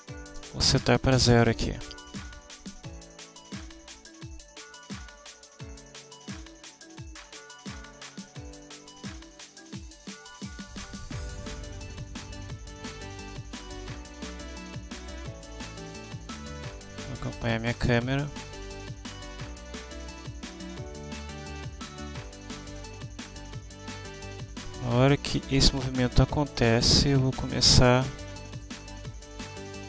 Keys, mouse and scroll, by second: 0.4 ,, 0.9 0, 1.8 Home, 3.5 click, 4.1 click, 10.3 click, 12.2-15.3 drag, 16.3 click, 17.6 click, 19.1-28.9 drag.